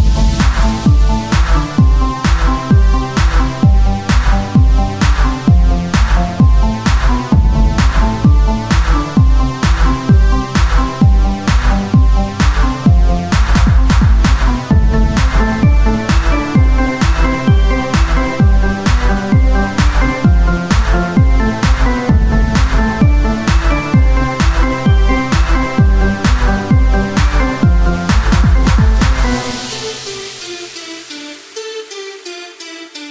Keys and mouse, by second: 1.5 s, 5.8 ctrl+r, 8.1-11.3 drag, 9.3 ctrl+Tab, 11.3 e, 12.5 Tab, 14.9 Tab, 15.6 ctrl+r, 16.6 Tab, 20.2 Tab, 21.0 z, 21.4 ctrl+Tab, 23.1 ctrl+Tab, 25.8 s, 30.0 z, 30.0 Tab, 30.6 Tab, 31.2 z, 31.6-32.6 drag, 32.5 z, 32.5 s.